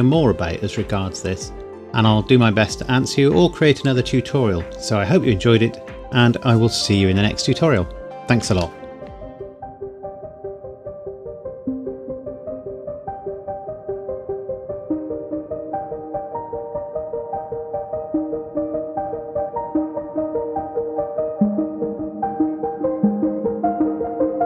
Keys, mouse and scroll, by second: 1.7-3.5 scroll up 1, 4.6 scroll up 1, 4.8-6.6 scroll down 1, 8.8 shift+middle click.